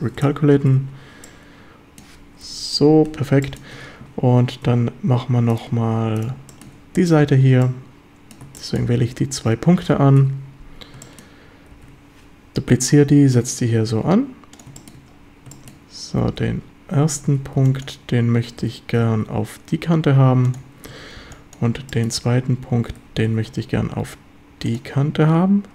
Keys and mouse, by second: 0.7 Tab, 1.2-2.0 drag, 2.4 KP_7, 3.4 shift+drag, 4.7 1, 6.2 shift+click, 6.5 shift+middle click, 7.6 middle click, 8.6 shift+middle click, 10.2 KP_7, 11.0 shift+middle click, 11.7 shift+d, 14.6 click, 14.8 shift+middle click, 15.5 shift+middle drag, 16.4 b, 17.3 a, 17.6 b, 18.6 g, 19.0 x, 20.5 ctrl+click, 20.9 a, 21.2 b, 21.9 shift+click, 22.9 g, 23.3 x, 24.7 ctrl+click.